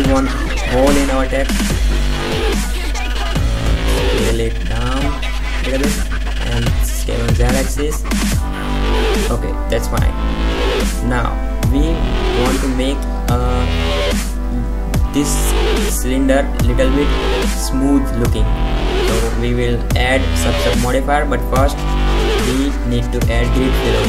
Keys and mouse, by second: 0.0 s, 1.9 g, 3.4 s, 5.7 middle click, 5.9 e, 6.1 middle click, 7.0 s, 7.9-8.3 middle drag, 9.7 KP_5, 9.9 KP_7, 10.4 KP_0, 12.8 g, 16.7-18.2 middle drag, 18.2 right click, 19.9 KP_Decimal, 21.9 KP_5, 23.8 Tab.